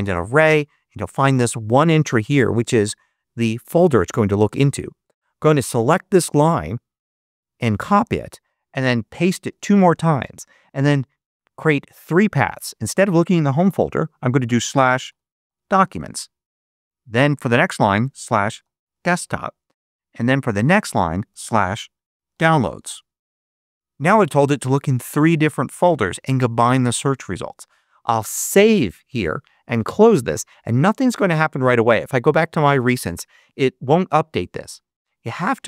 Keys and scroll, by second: 7.5 super+c, 9.0 super+v, 13.7-16.4 typing, 17.6-19.5 typing, 21.1-23.7 typing, 28.1 super+s.